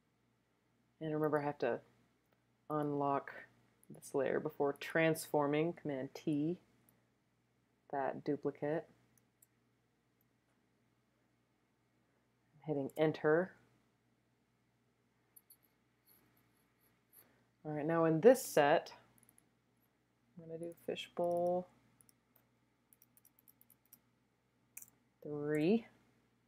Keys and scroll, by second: 6.1 super+t, 7.0 shift+t, 12.8 Return, 22.9 BackSpace, 23.1 BackSpace, 23.4 BackSpace, 23.6 BackSpace, 25.5 3.